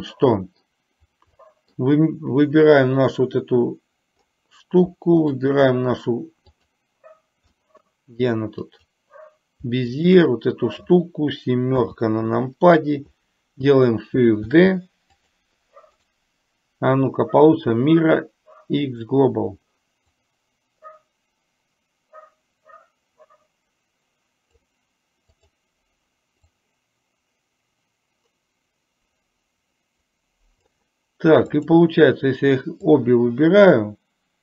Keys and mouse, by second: 0.2 middle click, 1.4-1.8 middle drag, 5.5 shift+click, 6.7 click, 7.7 middle click, 8.7 click, 10.0 shift+click, 14.7 shift+d, 16.0-19.3 right drag, 20.2-24.7 drag, 25.4 click, 26.7-30.8 drag, 31.5 click, 33.0-34.4 drag.